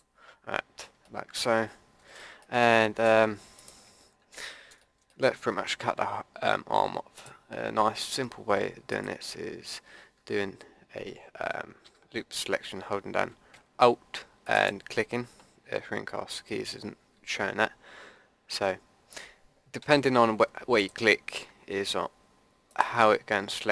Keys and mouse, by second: 2.9 Tab, 4.3 Tab, 11.8 a, 15.6 click, 18.6-19.8 middle drag, 19.8 a, 20.8-23.4 drag.